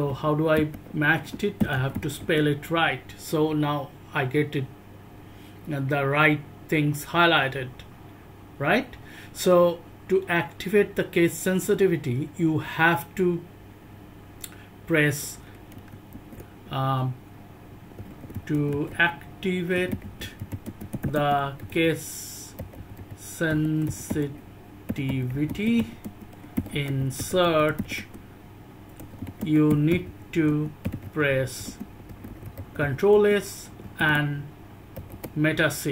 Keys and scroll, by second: 0.0-2.7 typing, 15.7 ctrl+g, 16.1 ctrl+g, 18.0-35.9 typing.